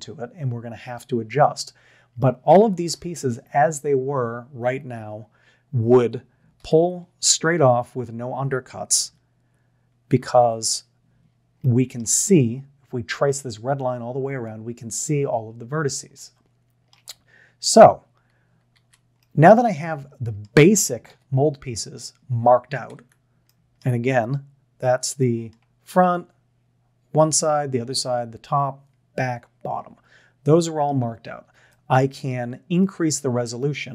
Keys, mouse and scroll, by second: 2.9 ctrl+KP_1, 6.6 ctrl+KP_3, 9.0 ctrl+KP_1, 10.3 ctrl+KP_7, 11.8 shift+middle click, 16.1-16.9 middle drag, 18.8 Tab, 19.3-20.5 middle drag, 21.1 KP_3, 23.0 Tab, 23.5-23.8 middle drag, 31.7 shift+middle click.